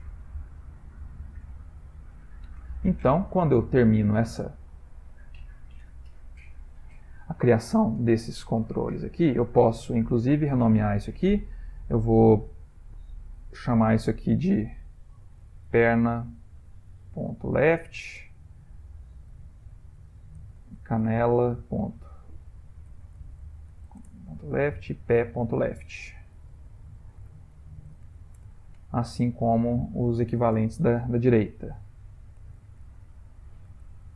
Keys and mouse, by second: 0.3 middle click, 0.5 middle click, 4.2 middle click, 4.6 ctrl+middle click, 4.7 ctrl+middle click, 5.4-5.8 shift+middle click, 5.8 ctrl+middle click, 6.9 middle click, 9.1 ctrl+middle click, 9.9 click, 14.0 F2, 19.0 click, 19.6 F2, 25.3 click, 26.8 F2, 29.7 click, 30.9 F2.